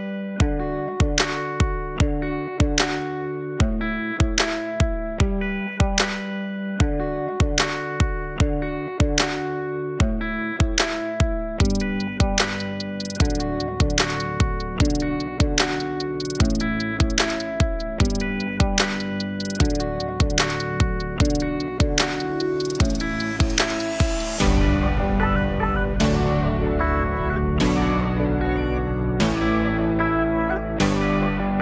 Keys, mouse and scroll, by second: 0.1-1.1 alt+drag, 1.1 f, 15.6-17.0 alt+drag, 17.0 alt+middle click, 17.4-19.1 alt+drag, 19.4 alt+click, 19.8 alt+middle click, 20.9 alt+click, 21.6 alt+middle click, 22.5 click, 23.3 alt+middle click, 24.2 alt+right click, 24.9 alt+click, 25.4 alt+m, 25.4 middle click, 29.9 alt+m, 29.9 middle click, 30.4 alt+click, 31.4-31.6 alt+drag.